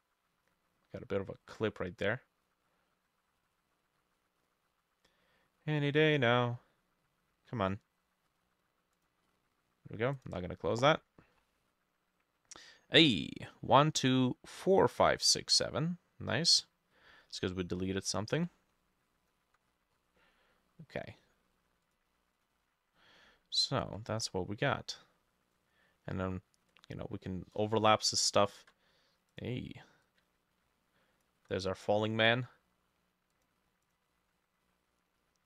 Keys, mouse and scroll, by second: 19.7-20.2 scroll down 10, 20.2 middle click, 20.9-21.2 scroll up 2, 21.2 middle click, 24.0-26.1 ctrl+drag, 24.0-26.1 ctrl+middle drag, 26.8 ctrl+click, 28.4-34.7 ctrl+drag, 28.4 ctrl+middle click, 30.2-31.7 ctrl+middle drag.